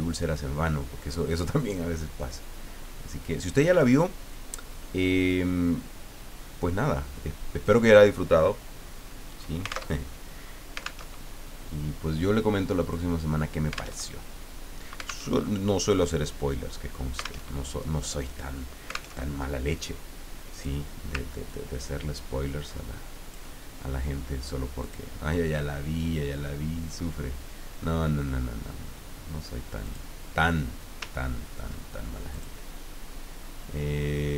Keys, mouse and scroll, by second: 2.3-4.0 drag, 5.3-7.8 drag, 9.3 click, 9.9 alt+Tab, 11.0 alt+Tab, 12.8 click, 14.0 alt+Tab, 15.3 alt+Tab, 17.4 alt+Tab, 19.2 alt+Tab, 20.5 click, 21.5-23.4 ctrl+drag, 24.8 click, 29.8 click, 31.2-31.8 ctrl+scroll up 4, 32.3 click.